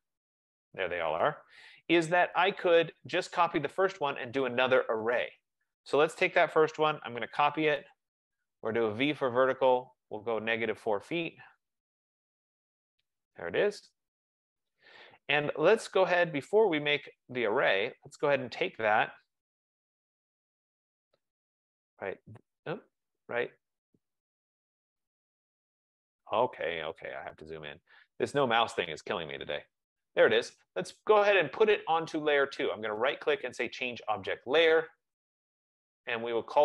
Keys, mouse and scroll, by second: 2.2 ctrl+z, 4.8 click, 7.1-9.4 typing, 11.3 click, 11.7-12.7 typing, 14.5 Return, 16.0 click, 18.1 click, 19.6 Return, 20.0 Escape, 20.3 Escape, 20.4 Escape, 22.1 click, 23.3 click, 24.1 F15, 25.6 click, 26.4 click, 27.5-28.3 scroll, 29.8 click, 32.3 right click, 34.1 right click, 34.2 click, 35.5 click, 35.8 click.